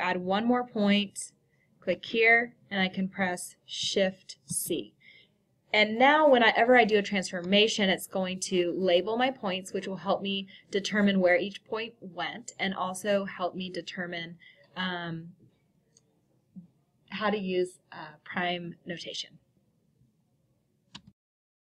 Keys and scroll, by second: 4.8 c.